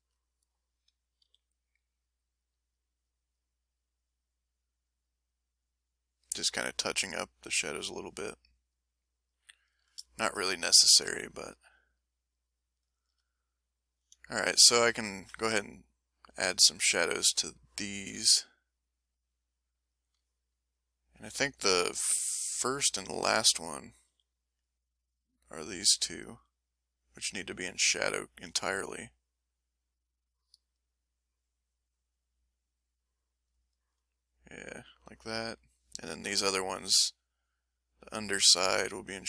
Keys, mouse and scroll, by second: 0.1 ctrl+middle click, 1.2 ctrl+f, 1.9-3.5 drag, 3.7-5.2 ctrl+drag, 5.3-6.4 ctrl+drag, 6.6 ctrl+click, 7.5 ctrl+click, 8.4 ctrl+click, 9.2 ctrl+click, 10.3 ctrl+middle click, 11.2 ctrl+click, 11.7 ctrl+right click, 12.6-14.6 ctrl+drag, 14.7-15.8 ctrl+drag, 15.8 ctrl+right click, 16.2 ctrl+click, 17.2 ctrl+s, 18.5-20.1 drag, 20.4 click, 21.3 click, 22.1 click, 24.1 f, 24.5 click, 26.3 f, 26.5-29.1 drag, 29.2-30.5 middle drag, 30.5 click, 30.6 middle click, 31.1-33.6 drag, 34.2 click, 35.4 middle click, 36.3-39.2 drag.